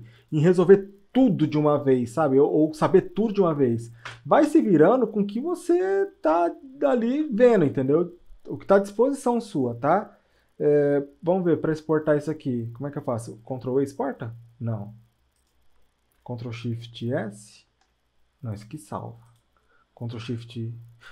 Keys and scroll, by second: 4.1 Return.